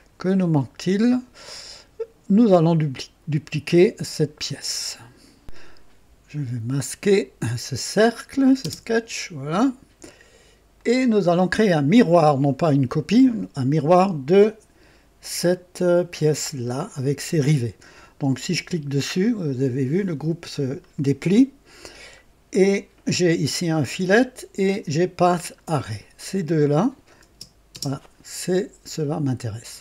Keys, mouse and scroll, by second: 0.2-1.0 right drag, 6.6 click, 8.6 space, 10.7 click, 18.6 click, 22.2 scroll down 1, 25.2 ctrl+click, 27.2 space, 27.7 space.